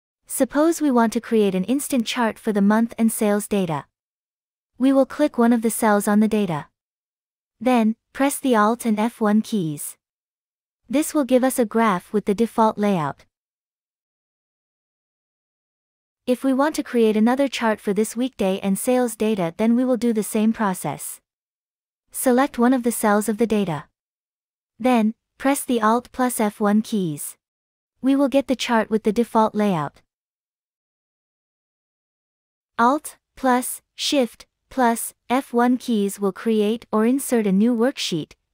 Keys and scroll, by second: 9.9 alt+F1, 26.9 alt+F1, 35.7 alt+shift+F1.